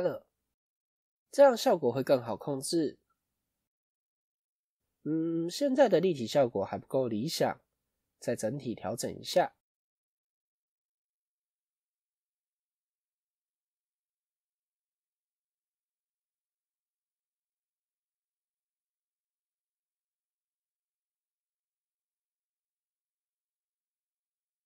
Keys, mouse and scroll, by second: 1.9 scroll up 1, 3.8-4.9 scroll up 1, 16.4 scroll up 1, 16.5 scroll down 1, 18.8 scroll down 2, 19.3 scroll up 1.